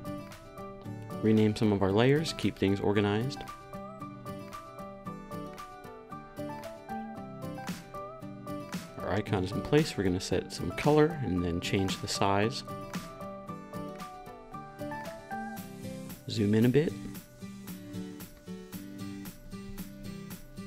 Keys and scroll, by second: 0.1-5.4 typing, 5.8 super+v, 13.2-14.0 typing.